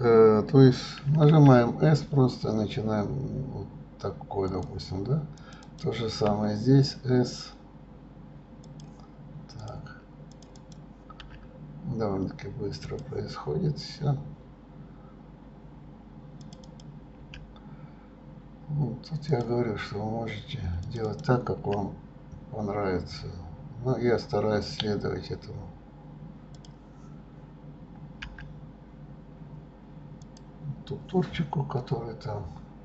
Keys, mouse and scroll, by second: 5.5 click, 5.8 click, 6.4 s, 9.8 click, 10.5 click, 10.7 click, 11.4 s, 16.6 click, 16.8 click, 17.4 s, 21.0 click, 21.2 click, 21.8 s.